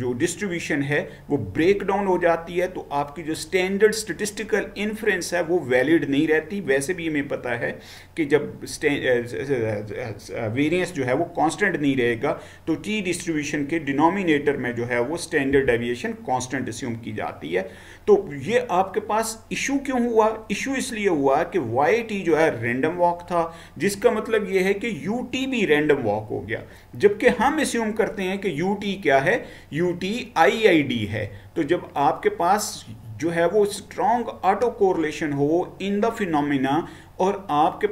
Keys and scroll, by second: 15.6 Down, 27.3 Right.